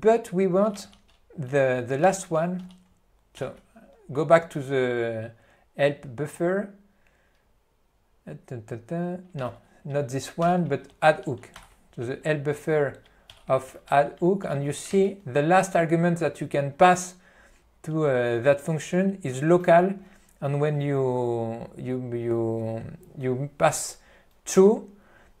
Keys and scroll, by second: 1.0 ctrl+g, 2.0-3.2 typing, 3.8 ctrl+d, 9.7 Left, 10.3-11.7 typing, 11.7 ctrl+d, 13.5-15.1 typing, 15.1 ctrl+b.